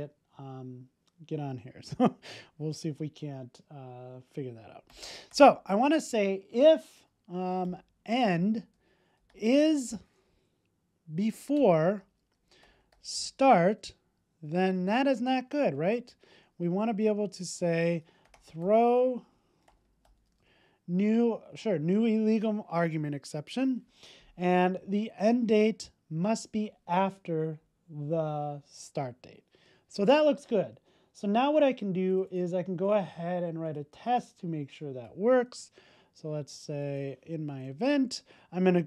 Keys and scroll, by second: 11.6 Return, 22.2 super+s, 30.4 super+s, 37.4 alt+Return.